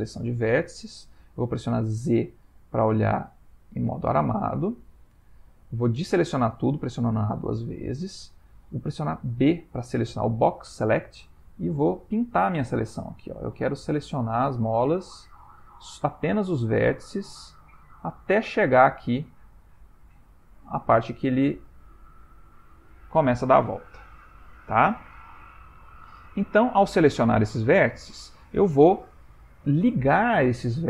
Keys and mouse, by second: 2.0 z, 4.6 a, 6.0 a, 9.4 a, 9.4 c.